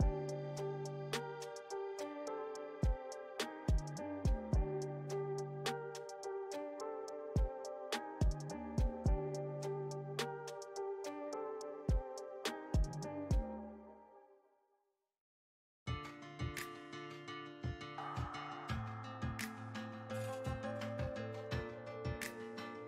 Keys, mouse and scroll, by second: 1.8 middle click, 2.2-4.8 drag, 4.8-6.0 middle drag, 6.0 shift+c, 6.5 f, 7.4-12.8 drag, 12.8 middle click, 13.6 f, 14.6 middle click, 15.4-19.5 drag, 19.5-20.7 middle drag, 20.7-22.8 drag.